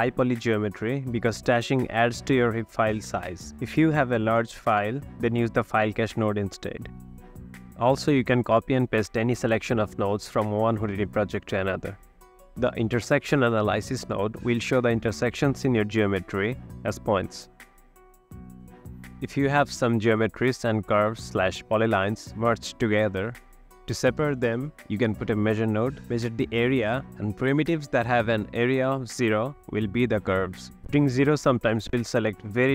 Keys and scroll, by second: 0.0-1.6 typing, 3.0 ctrl+c, 4.9 ctrl+v, 5.5-6.4 typing, 7.7 ctrl+c, 10.1 ctrl+v, 12.6-15.0 typing, 18.1-20.4 typing, 30.0 f.